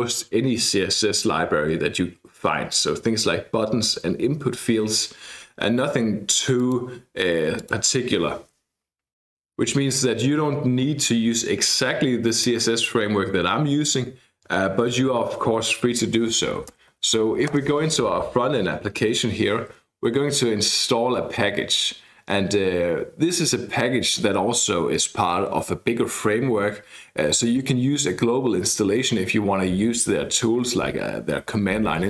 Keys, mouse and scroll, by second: 6.6 click, 7.6 click, 12.4 click, 16.2-17.4 typing, 17.5 Return.